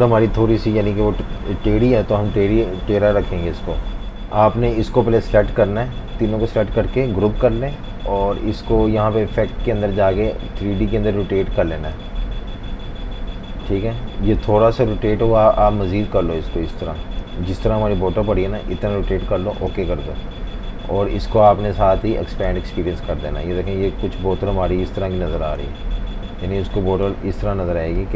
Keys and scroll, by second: 3.5 F19, 7.3 super+g.